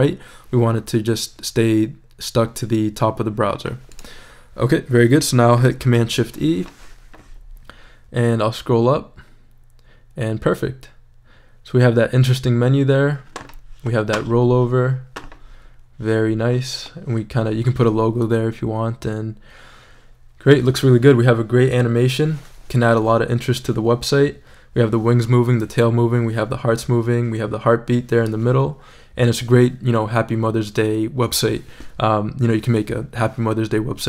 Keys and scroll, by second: 6.0 shift+super+e.